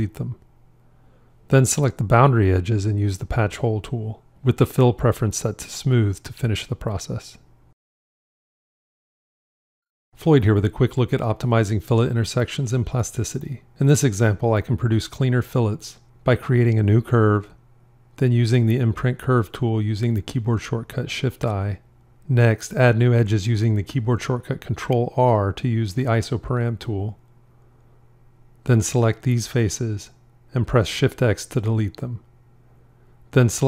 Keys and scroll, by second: 0.1 shift+x, 18.8 shift+i, 24.1 ctrl+r, 30.9 shift+x.